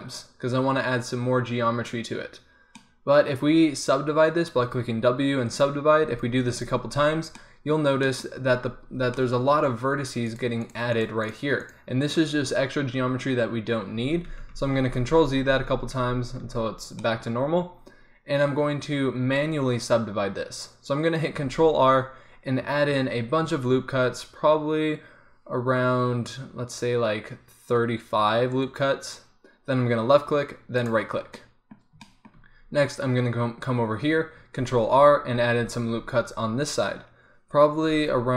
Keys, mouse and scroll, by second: 4.7 w, 6.0 w, 6.4 w, 7.1 middle click, 14.1 ctrl+z, 14.3 ctrl+z, 14.5 ctrl+z, 14.8 ctrl+z, 15.0 ctrl+z, 15.3 ctrl+z, 15.5 ctrl+z, 16.0 ctrl+z, 16.5 ctrl+z, 21.5 ctrl+r, 31.5 click, 34.6 ctrl+r.